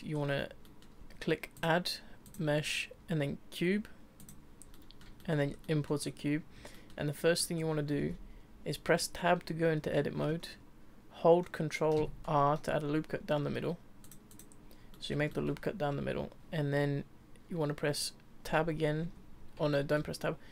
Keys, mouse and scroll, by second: 0.1-0.6 scroll up 3, 0.6 middle click, 1.5-4.6 drag, 4.7-5.5 middle drag, 5.5 scroll up 1, 5.6-7.5 middle drag, 7.5-8.1 scroll up 3, 8.1 Tab, 12.0 ctrl+r, 14.9-18.4 middle drag, 18.4 Tab, 19.0 Tab, 19.7-20.5 shift+middle drag.